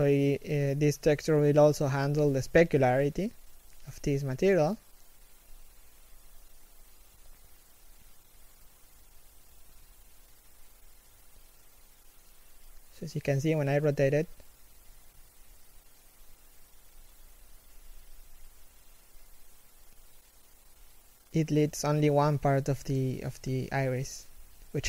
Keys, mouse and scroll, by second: 14.3 z, 15.0 KP_3, 15.5-15.8 scroll up 1, 16.0 a, 17.5 Tab, 17.6 a, 18.1 alt+right click, 19.3 alt+shift+middle click, 19.7 g.